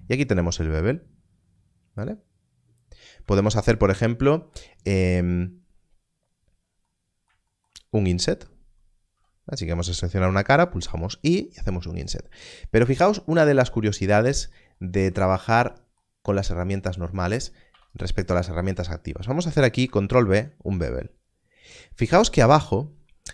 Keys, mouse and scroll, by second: 2.0 right click, 3.4 ctrl+z, 7.2 ctrl+z, 9.1 3, 10.7 1, 12.0 click, 13.5-14.5 scroll down 1, 15.3 scroll down 1, 16.2-17.0 scroll up 1, 17.0 click, 17.7 2, 20.3 ctrl+b.